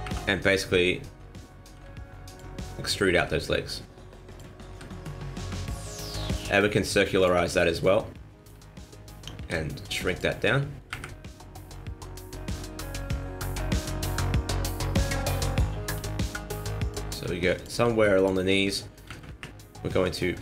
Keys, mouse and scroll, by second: 0.0 KP_1, 1.7 e, 3.1 g, 4.7 r, 5.9 shift+middle click, 7.1 click, 7.7 middle click, 9.3 s, 10.9 KP_1, 12.4 g, 15.8 g, 17.0 s, 17.7 g, 19.0 KP_1, 19.3 KP_3, 20.3 r.